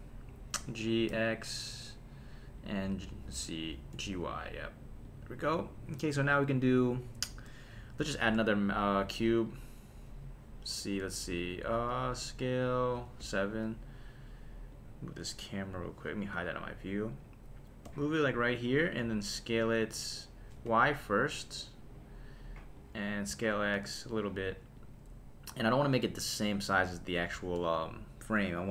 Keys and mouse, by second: 0.6 g, 1.1 x, 2.6 click, 2.8 f, 3.5 Escape, 3.9 g, 4.1 y, 5.0 click, 8.1 shift+a, 13.2 KP_7, 14.7 click, 16.3 h, 17.1 click, 17.8 g, 18.8 click, 19.0 s, 20.7 y, 22.7 click, 23.2 s, 23.7 x, 24.8 click, 27.3 s, 27.6 z.